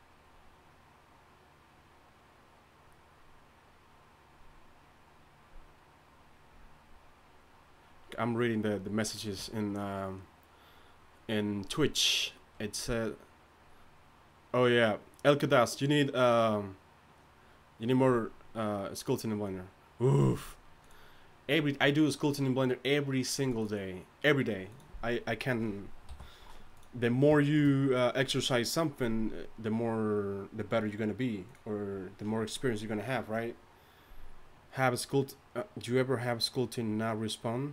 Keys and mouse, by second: 26.1 t.